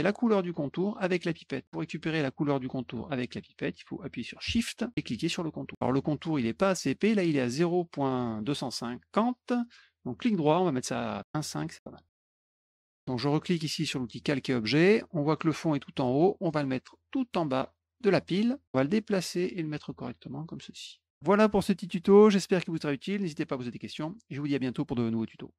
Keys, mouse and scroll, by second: 5.6 shift+click, 10.1 right click, 11.2 alt+click, 14.1 click, 16.1-17.7 drag, 18.6-20.0 drag, 20.7 click.